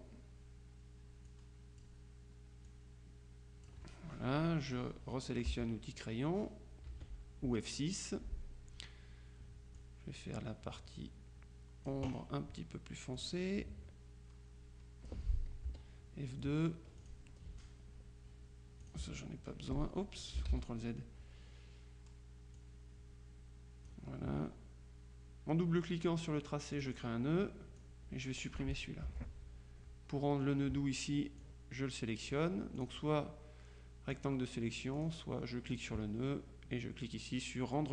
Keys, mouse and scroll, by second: 1.4 click, 2.8 click, 5.6 F6, 7.0 F6, 9.8-12.4 drag, 13.2-15.7 drag, 15.8 F2, 17.1 click, 18.9 click, 19.1 Delete, 20.6 ctrl+z, 22.6-24.4 drag, 26.8 click, 27.9 click, 29.2 Delete, 31.5 click, 33.1 click, 35.0 click, 35.8 click.